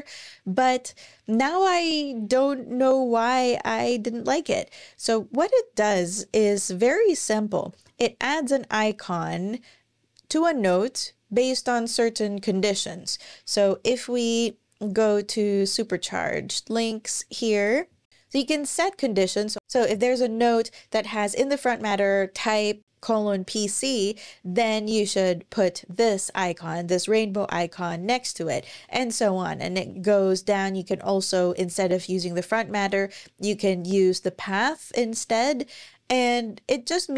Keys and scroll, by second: 7.5 ⟲, 13.5 super+,.